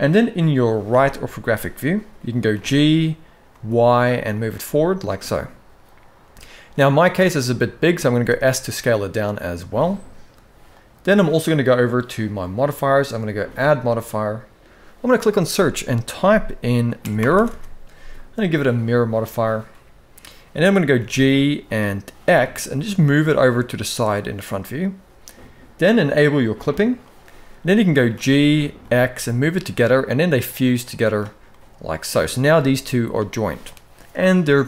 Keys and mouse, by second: 0.6 KP_3, 2.3 g, 5.0-6.0 middle drag, 7.9 s, 13.3-18.5 drag, 17.2 r, 20.7 g, 26.4 click, 27.8 g, 31.2 middle click, 32.3 g.